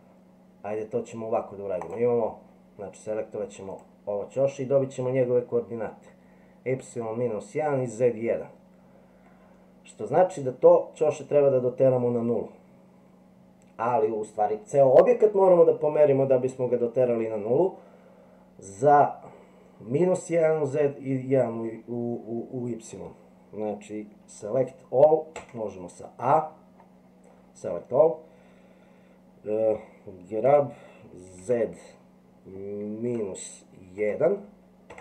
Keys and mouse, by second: 1.8 click, 25.4 a, 30.4 g.